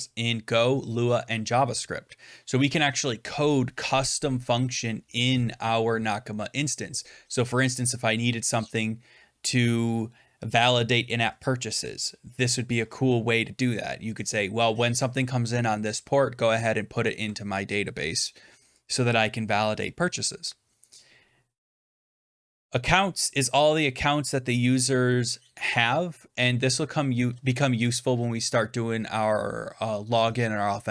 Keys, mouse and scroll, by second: 22.0-23.5 drag.